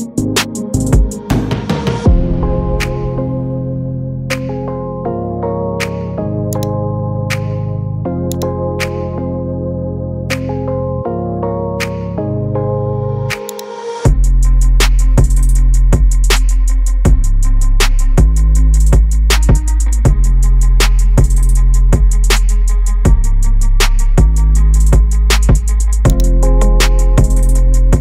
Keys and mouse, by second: 2.2 KP_Decimal, 3.2 middle click, 5.2 middle click, 7.1 shift+middle click, 8.4 shift+click, 9.1 middle click, 9.9 middle click, 13.5 click, 16.2 s.